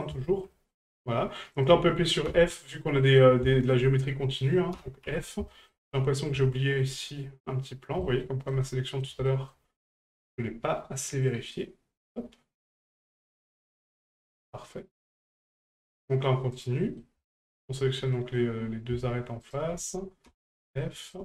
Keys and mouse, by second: 0.2 shift+middle click, 0.5 middle click, 1.5 right click, 3.0 middle click, 3.5 shift+middle click, 5.5 shift+middle click, 5.8 middle click, 6.5 shift+middle click, 6.9-8.0 middle drag, 8.2 shift+middle click, 8.6 middle click, 9.3 shift+middle drag, 11.2 click, 12.0 right click, 13.9 shift+middle drag, 15.1 click, 15.6 middle click, 16.5 right click, 16.8 middle drag, 17.4 middle click, 18.1 middle click, 19.4 shift+right click, 20.8 shift+middle drag.